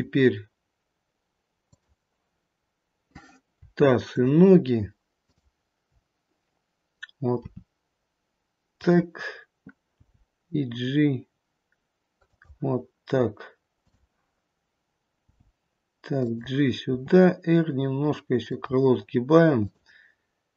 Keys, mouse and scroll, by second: 3.9 shift+click, 5.8 shift+click, 7.4 r, 10.1 g, 13.8 click, 15.2 g, 16.9 r, 19.7 click.